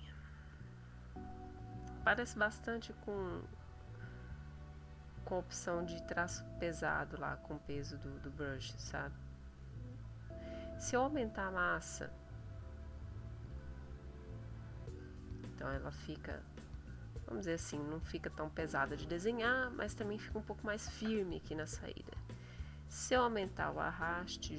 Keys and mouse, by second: 1.3 click, 2.9 click, 4.8 click, 6.6 click, 8.0 click, 9.2 middle click, 9.9 middle click, 11.4-13.6 drag, 14.2-15.3 drag, 16.0-17.1 drag, 21.3 click, 21.7 middle click, 23.1-24.5 drag.